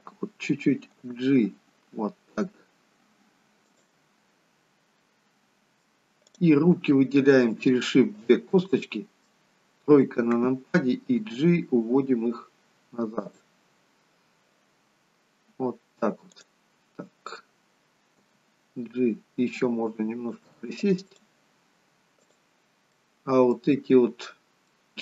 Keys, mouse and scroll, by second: 1.0 g, 5.0 middle click, 6.3 click, 8.2 shift+click, 8.8 middle click, 9.9 KP_3, 11.2 g, 16.3 click, 18.4 g, 22.2 click, 22.9 middle click, 24.7 middle click.